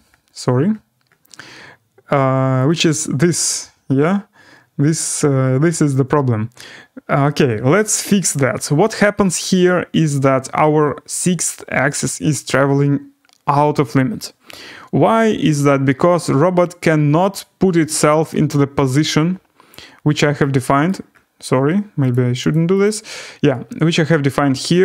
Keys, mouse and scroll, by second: 2.7 click, 17.3 click, 19.7 click, 20.8 right click, 21.1 scroll, 22.1 click, 22.1-22.5 scroll down 6, 22.5 click, 22.8 click, 23.4-24.0 scroll down 1, 24.0-24.8 scroll down 1.